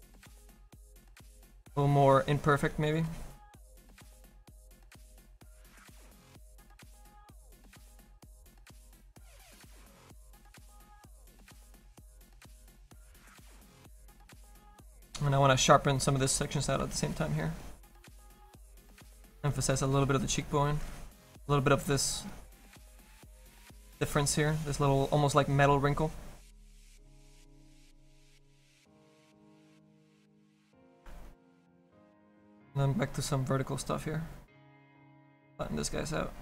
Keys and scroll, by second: 5.2 s, 6.3 s, 8.3 s.